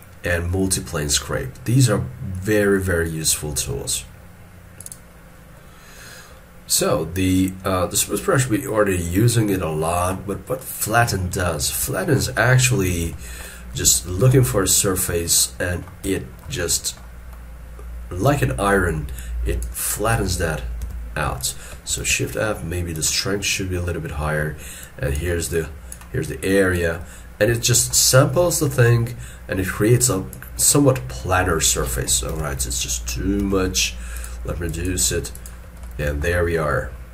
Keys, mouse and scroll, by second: 12.0 shift+middle click, 13.2 shift+middle click, 13.5 shift+scroll down 1, 13.9 shift+scroll, 14.7-15.4 scroll up 1, 16.1 middle click, 20.9 f, 22.1 shift+f, 23.6 middle click, 27.1-27.5 scroll down 1, 27.7 shift+middle click, 28.5-30.8 scroll up 1, 32.3 ctrl+z, 33.4 f, 34.7 double click.